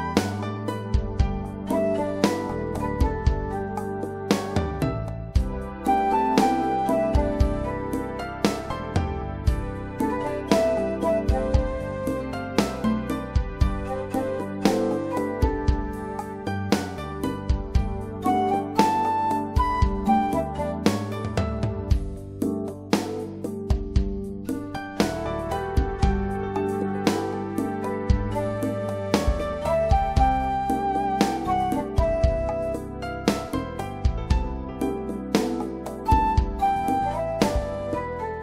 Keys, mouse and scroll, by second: 0.3 click, 7.7 right click, 8.6 click, 12.4 click, 15.4 click, 24.9 click, 29.2 click, 31.2 click.